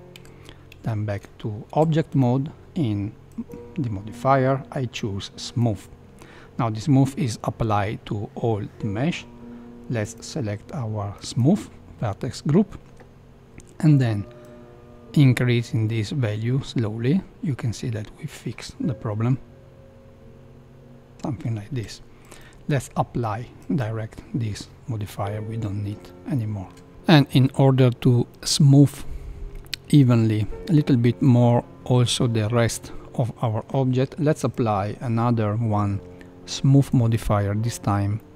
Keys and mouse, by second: 0.1 Tab, 0.8 shift+middle click, 3.4-5.5 drag, 10.3-11.5 drag, 25.0-25.5 middle drag, 26.0-26.7 middle drag, 27.1 middle click, 28.3 middle click, 29.5 middle click, 30.3 middle click, 31.2 middle click, 32.6-33.6 middle drag, 34.3-37.1 drag, 38.1-38.3 middle drag.